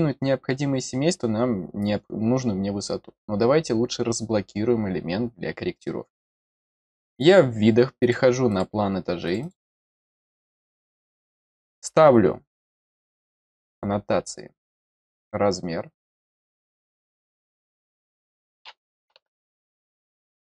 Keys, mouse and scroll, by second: 7.1 click, 8.0 click, 8.4 click, 9.2 click, 9.4 click, 10.6 middle click, 11.1 middle click, 13.6 click, 15.1 click, 15.9 click, 16.9 click, 17.6 click, 20.0 click.